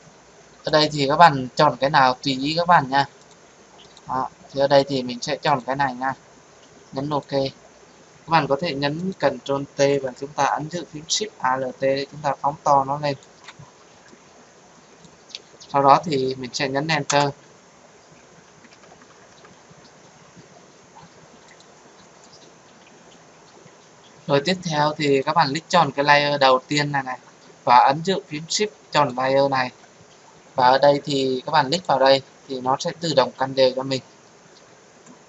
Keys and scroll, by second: 9.8 ctrl+t, 17.0 Return.